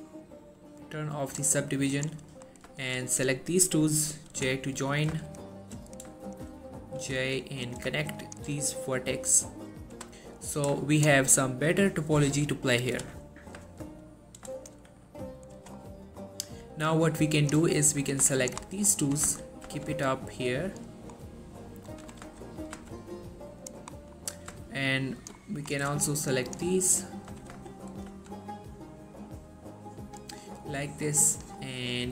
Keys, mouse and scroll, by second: 1.3 click, 2.4 middle click, 3.0 shift+click, 4.4 j, 5.0 click, 5.4 shift+click, 6.3 shift+click, 7.1 j, 7.8 click, 8.3 shift+click, 10.0 j, 10.6 click, 11.1 shift+click, 13.0 j, 14.1 click, 14.7 shift+click, 15.7 j, 15.9-16.6 middle drag, 17.5 click, 18.5 shift+click, 18.8 shift+middle click, 19.1 g, 19.3 y, 19.8 x, 20.8 right click, 21.3 middle click, 22.1 g, 22.3 y, 22.9 x, 23.7 right click, 24.1 middle click, 25.0 shift+click, 25.5 middle click, 25.8 scroll up 1, 26.3 shift+click, 26.7-27.1 shift+scroll down 1, 27.1 middle click, 27.5 g, 27.6 y, 28.2 x, 30.2 click, 31.7 middle click.